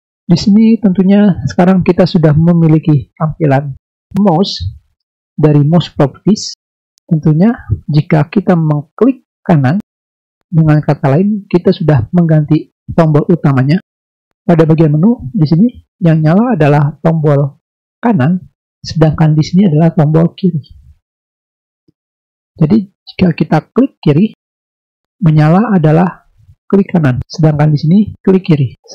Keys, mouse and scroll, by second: 9.8 click, 9.9 click, 20.5 click, 20.7 click, 21.7 click, 24.2 right click.